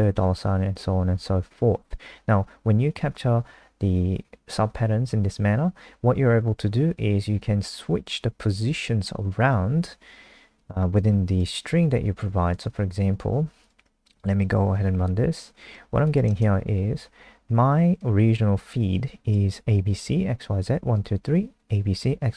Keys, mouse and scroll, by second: 14.1 F5, 15.4 click, 16.0 click, 17.9 click.